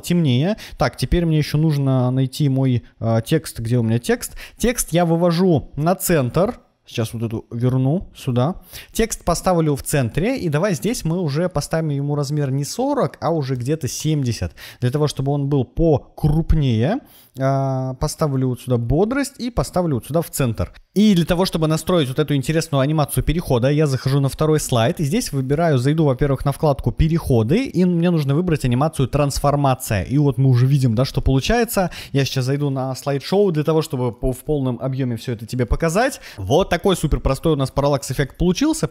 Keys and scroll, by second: 10.9 super+a, 12.9-13.9 typing, 36.3 Right, 38.5 Left.